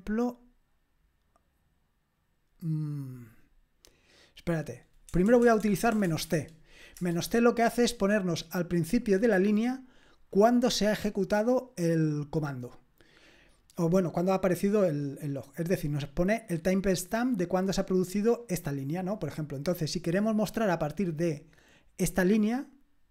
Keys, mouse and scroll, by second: 5.1-6.2 typing, 7.0 Return.